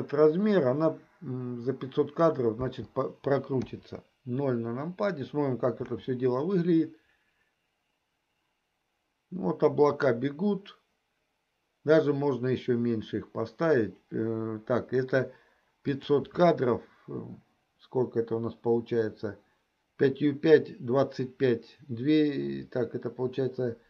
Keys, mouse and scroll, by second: 2.7 space, 3.6 KP_0, 6.4 space, 16.1 click.